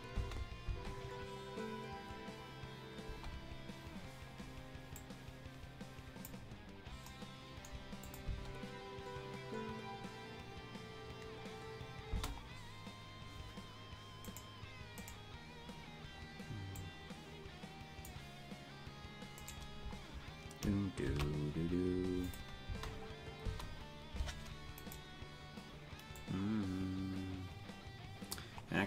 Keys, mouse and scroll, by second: 0.2 space, 4.9-6.3 drag, 4.9 space, 8.1 click, 8.3 space, 12.2 space, 14.2-16.7 right drag, 16.7-18.1 drag, 19.4-21.0 right drag, 21.0 shift+d, 22.6 space, 23.6 space, 25.1 right click, 26.2-28.4 drag.